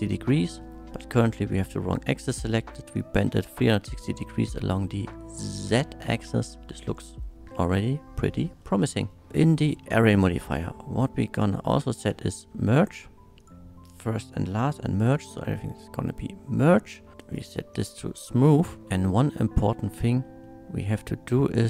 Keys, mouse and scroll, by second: 0.8 middle click, 2.9 click, 3.7-4.3 middle drag, 4.6 shift+middle click, 4.9-5.9 shift+middle drag, 6.1-8.2 shift+middle drag, 8.6 shift+middle drag, 9.5 shift+middle drag, 10.0-12.3 scroll down 1, 12.3 shift+click, 13.4 click, 14.2 click, 15.0 click, 15.7 middle click, 17.2 click, 17.8-18.4 middle drag, 18.8 Tab, 18.8 2, 20.1 shift+middle click, 20.4 shift+middle click, 20.9 shift+middle click.